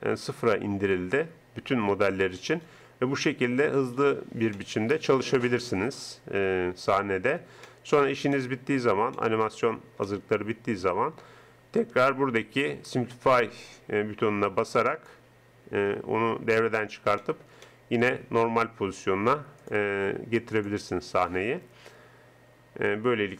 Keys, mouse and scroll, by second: 0.6 middle click, 2.0 g, 5.8 g, 7.6 click, 15.1-16.8 drag, 17.2 middle click, 19.6-20.8 drag, 21.6 click.